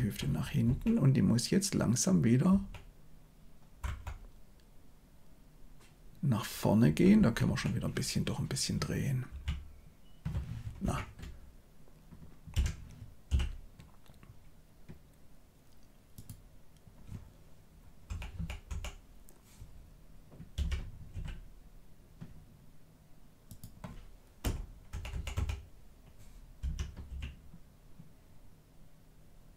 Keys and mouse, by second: 0.2 Right, 0.6 Right, 2.5 Right, 3.8 Left, 6.8 Right, 7.1 Right, 7.4 Right, 9.3 r, 12.5 r, 18.0 Right, 18.3 Right, 18.6 Right, 20.5 r, 24.9 Right, 25.1 Right, 25.3 Right, 26.5 r.